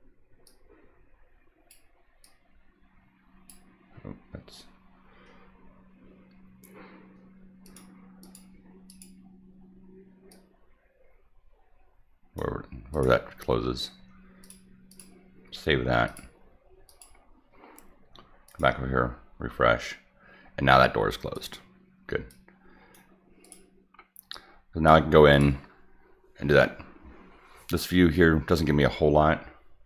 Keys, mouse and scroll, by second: 0.4-1.7 drag, 2.2-3.5 drag, 7.6 click, 8.2 click, 8.9 click, 10.3-12.3 drag, 12.9 click, 14.4 click, 14.9 click, 16.0 click, 16.8 click, 18.4 click, 21.3 click, 22.3-22.9 drag, 23.4 click, 24.3-24.8 drag, 25.3 click.